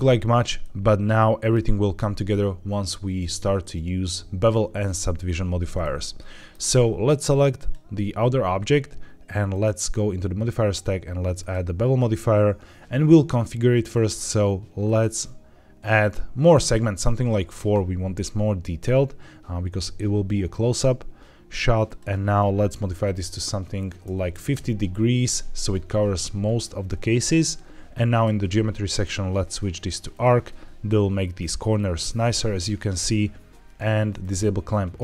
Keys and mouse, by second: 0.5-1.4 shift+middle drag, 5.9 middle click, 9.4-11.4 drag, 13.8 click, 14.7 click, 21.9-24.5 drag, 28.0 click, 28.8-30.1 drag, 34.1 click.